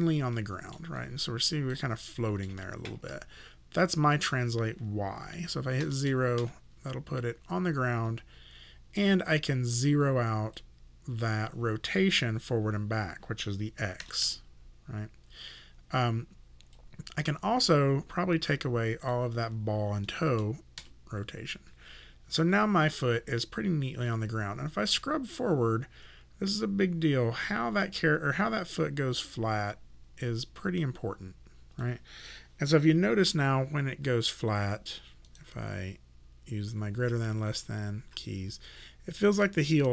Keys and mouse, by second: 0.4 alt+middle click, 1.0 alt+right click, 2.1 alt+middle click, 4.1 click, 5.8 KP_0, 6.4 Return, 6.4 KP_Enter, 10.6 click, 14.0 KP_0, 14.2 Return, 16.7 click, 20.1 KP_0, 20.8 Return, 24.1 click, 34.5 ., 35.3 right click, 36.9 ., 37.4 ,, 38.0 ., 38.5 ,.